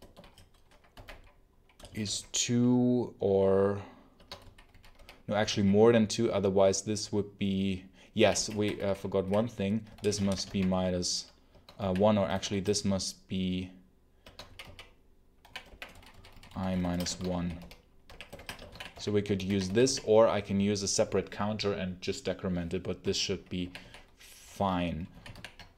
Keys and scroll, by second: 0.0-2.0 typing, 4.0-5.9 typing, 7.8-12.3 typing, 11.4 Escape, 14.1 Escape, 14.3-19.9 typing, 23.5 j, 25.0-25.7 typing.